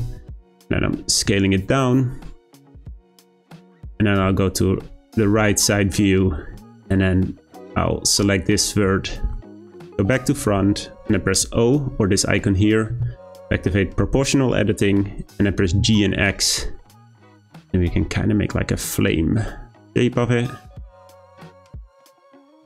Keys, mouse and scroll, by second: 3.1 middle click, 3.5 `, 5.1-5.5 scroll up 2, 5.5 shift+middle click, 5.8-6.5 scroll up 2, 6.5 1, 6.9 click, 8.5-9.0 scroll down 2, 9.0 middle click, 12.9 o, 14.7-15.4 scroll down 4, 15.4 scroll up 1, 15.7 g.